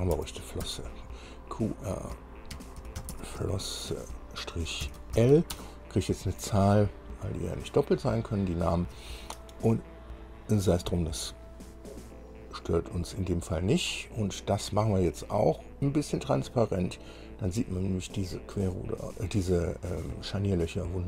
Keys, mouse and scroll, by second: 0.4 BackSpace, 0.9 BackSpace, 2.8-5.4 typing, 16.3-17.9 drag, 19.5 middle click.